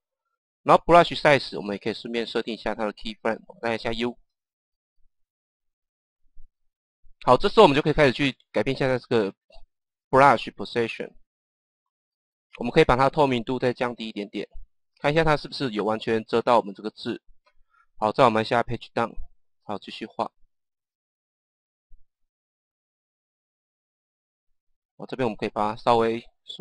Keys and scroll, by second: 3.8 u, 18.8 Page_Down, 23.6 Page_Down.